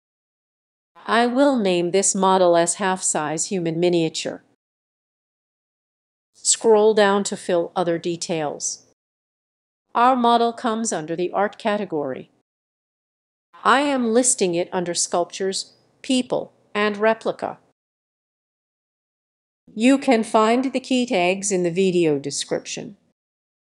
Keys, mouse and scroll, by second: 1.7-5.2 typing, 13.8 click, 15.6 click, 16.7 click, 20.3-23.7 typing.